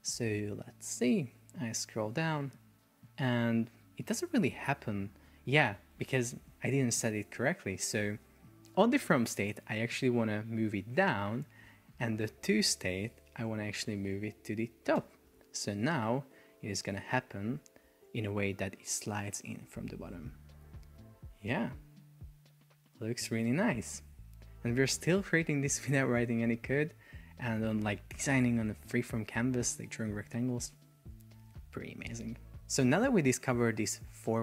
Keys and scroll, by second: 5.9 Escape, 14.6 super+a, 15.0 Return, 16.9 Return, 16.9 Escape, 17.3 super+p, 28.0 Escape, 31.1 Delete.